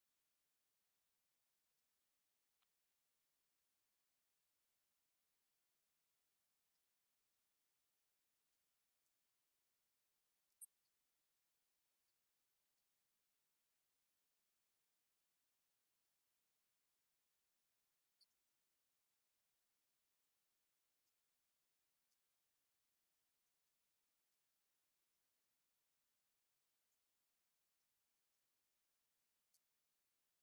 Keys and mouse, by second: 0.6-3.5 drag, 11.2 click, 12.4 click.